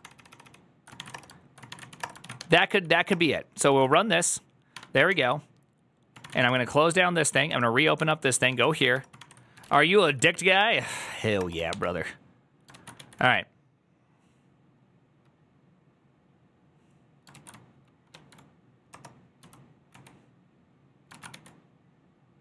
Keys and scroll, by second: 0.0-2.8 typing, 3.0 Return, 3.6 ctrl+a, 4.6 1, 5.0 ctrl+h, 5.9-13.1 typing, 7.2 Up, 7.4 Return, 7.8 ctrl+h, 10.5 Return, 17.2 ctrl+a, 18.7-21.2 typing, 21.0 ctrl+a.